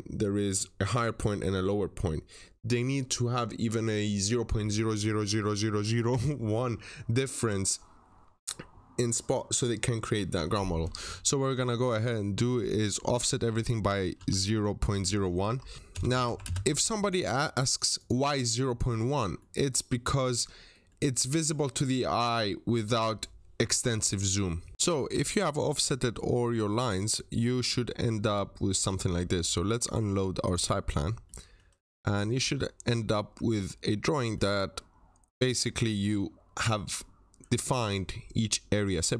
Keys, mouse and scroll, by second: 10.9 Escape, 11.3 middle click, 12.5 click, 14.0 Return, 15.7 Escape, 15.7 Return, 15.7-16.3 typing, 16.9 click, 17.6-18.4 typing, 17.9 double click, 18.1 scroll down 1, 18.2 middle click, 20.2-20.6 scroll down 1, 20.6 middle click, 25.1 middle click, 26.1 scroll up 1, 26.6 middle click, 29.7 right click, 30.3 click, 30.7-31.3 scroll down 2, 30.9 middle click, 31.4 Escape, 31.8 scroll down 1, 32.0 middle click, 35.6 click.